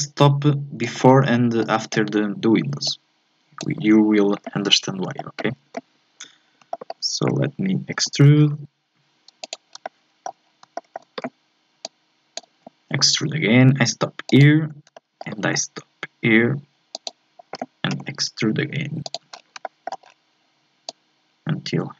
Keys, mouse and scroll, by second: 1.0-1.3 scroll up 4, 1.3 shift+middle click, 2.3-2.8 scroll up 1, 2.8-5.2 drag, 5.2-6.5 shift+middle drag, 6.5 scroll up 1, 6.7-8.0 shift+middle drag, 8.0 e, 9.7 scroll down 2, 9.9 shift+middle click, 10.4-10.7 scroll up 2, 10.7-11.8 shift+middle drag, 11.8-12.9 drag, 12.9 e, 14.6-14.9 scroll up 3, 14.9 shift+middle click, 15.4 e, 17.9 e, 19.3 scroll down 2, 19.6 shift+middle click, 20.0-20.9 scroll down 3, 20.9-21.9 drag.